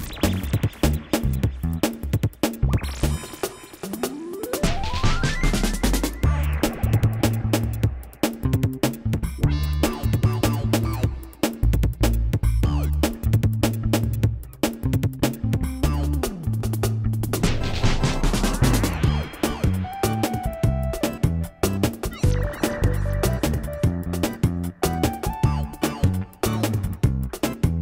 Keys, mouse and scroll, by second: 0.1 middle click, 1.1 Tab, 1.6 Tab, 1.9 g, 3.0 Tab, 3.5 shift+2, 3.6 click, 4.8 q, 5.4 KP_1, 5.8 Tab, 5.9 Tab, 6.8 Tab, 7.0 click, 7.7 KP_1, 8.2 g, 9.2 Tab, 11.2 Tab, 11.7 ctrl+a, 12.4 g, 12.8 g, 13.7 Tab, 14.4 ctrl+a, 14.6 shift+click, 15.1 ctrl+a, 15.8 click, 18.1 shift+2, 18.2 click, 18.7 click, 20.8 KP_1, 21.1 Tab, 22.5 click, 22.7 Tab, 23.3 g, 23.9 Tab, 24.3 click, 25.0 e, 26.5 g, 27.0 KP_1, 27.1 Tab, 27.5 shift+a.